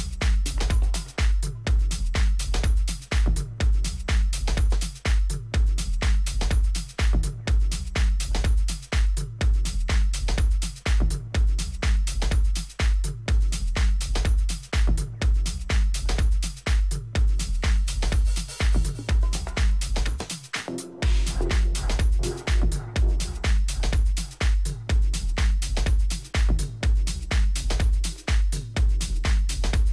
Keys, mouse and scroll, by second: 2.3-4.0 middle drag, 4.2-8.6 middle drag, 18.6-22.7 middle drag, 25.4 KP_3, 25.9 z, 29.0 a, 29.7 Tab.